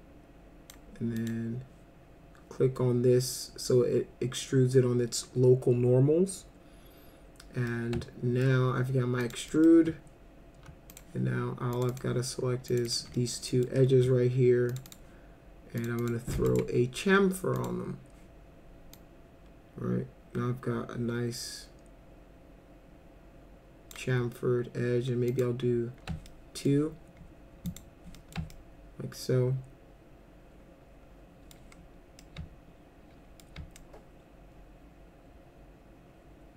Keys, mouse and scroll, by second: 1.2 click, 7.7-8.4 alt+middle drag, 9.2 click, 9.5 middle drag, 10.9 click, 11.7 click, 11.9 click, 12.7 ctrl+click, 12.9 ctrl+click, 13.1 middle click, 13.5 middle click, 14.7 ctrl+click, 14.9 ctrl+click, 15.8 ctrl+click, 16.0 ctrl+click, 16.5 right click, 17.6 click, 19.0-23.9 drag, 25.3 click, 26.3 alt+middle click, 27.7 click, 28.1 middle click, 28.5-31.5 alt+middle drag, 32.2-33.4 alt+middle drag, 33.8-36.5 alt+middle drag.